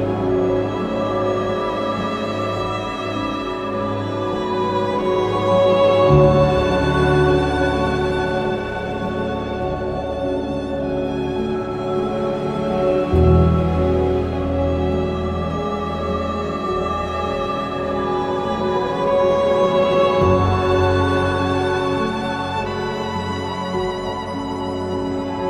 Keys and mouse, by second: 0.6 j, 1.3 click, 2.9 j, 5.7 g, 6.6 g, 6.8 click, 7.2 click, 7.6 q, 9.2 g, 9.3 g, 10.9 q, 11.9 click, 13.0 shift+click, 14.1 s, 14.4 y, 15.7 Tab, 19.2 middle click, 20.6 shift+middle click.